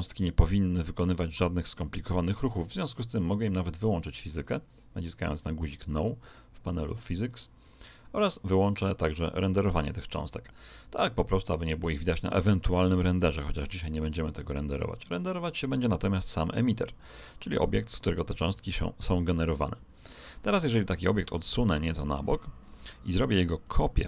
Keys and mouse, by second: 3.1-4.3 middle drag, 4.3 click, 6.3-9.1 middle drag, 10.4 click, 20.9 click.